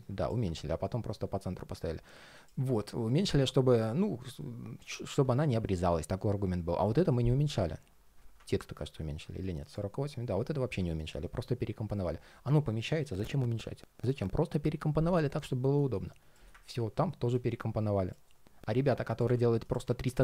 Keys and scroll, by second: 5.2 super+z.